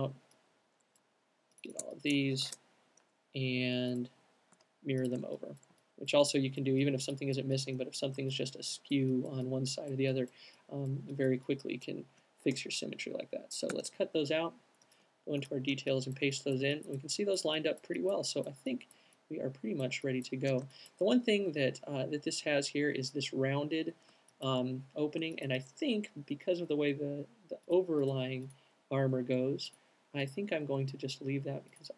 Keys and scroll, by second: 1.6 v, 4.6 q, 5.2 alt+q, 13.9 super+x, 15.2 alt+super+x, 15.2 v.